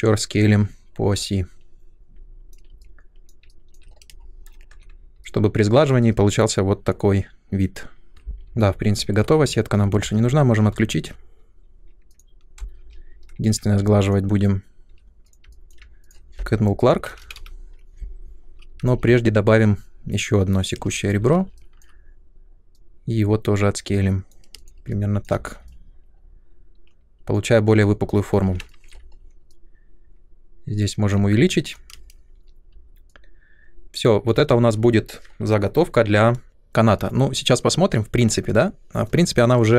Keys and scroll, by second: 4.1 space, 4.7 Tab, 8.7 ctrl+1, 10.0 space, 13.4 shift+Tab, 14.8 2, 17.2 Up, 18.8 alt+c, 20.6 alt+c, 20.7 space, 21.1 r, 24.5 space, 25.3 Tab, 28.2 r, 31.9 space.